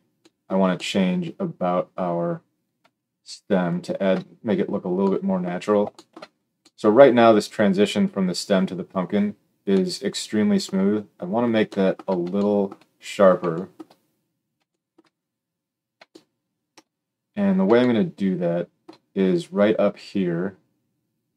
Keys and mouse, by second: 3.8-21.3 alt+shift+middle drag.